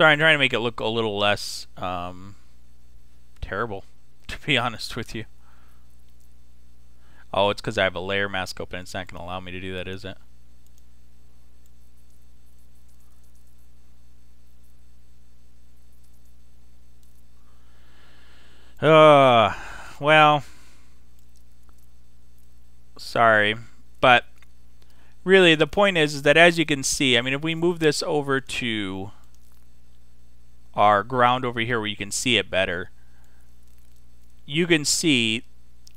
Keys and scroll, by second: 4.8 super+d.